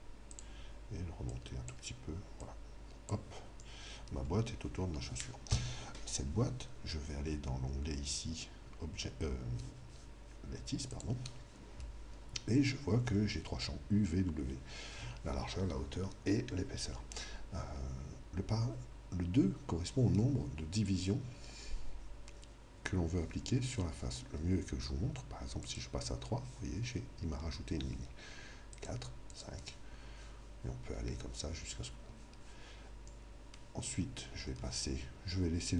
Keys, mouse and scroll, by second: 0.4-4.3 drag, 0.5 g, 3.6-5.5 middle drag, 3.6 g, 10.9 click, 25.6 click, 33.2-35.7 middle drag.